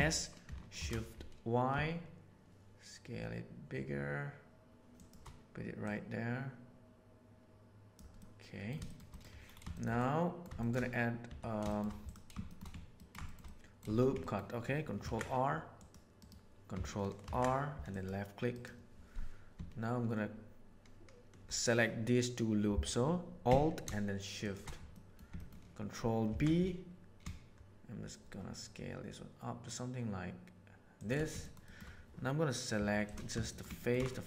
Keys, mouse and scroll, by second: 5.8 middle click, 6.4-7.9 drag, 8.1-8.7 middle drag, 8.8 shift+middle click, 9.9-10.4 middle drag, 10.6 shift+middle click, 11.2 Tab, 11.6 middle click, 12.9 ctrl+middle click, 13.0-13.4 shift+scroll down 2, 13.2 shift+middle click, 13.4 middle click, 14.2 ctrl+middle click, 15.0 ctrl+r, 17.2 ctrl+r, 24.9 middle click, 25.3 ctrl+click, 26.2 ctrl+b, 31.4 shift+middle click, 32.7 3, 33.4 shift+middle click, 33.7 ctrl+middle click, 34.0 shift+middle click.